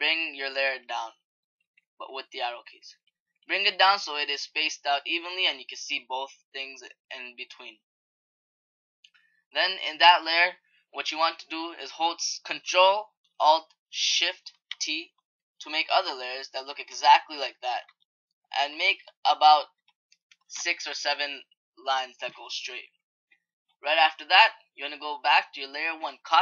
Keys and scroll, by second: 14.5 ctrl+alt+shift+t.